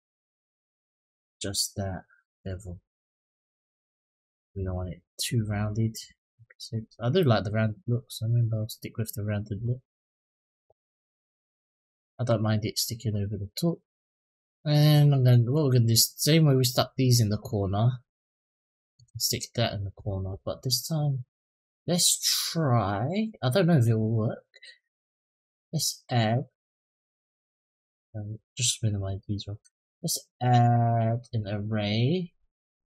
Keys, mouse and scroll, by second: 2.2-9.3 drag, 10.8 click, 11.2-11.6 middle drag, 11.9-12.4 scroll down 1, 12.4 click, 13.6 click, 15.3-16.9 drag, 17.3 scroll down 1, 17.4-18.7 middle drag, 25.1-26.9 scroll down 5, 26.9-28.0 scroll up 2, 28.0 click, 28.7 click, 29.5-31.1 drag.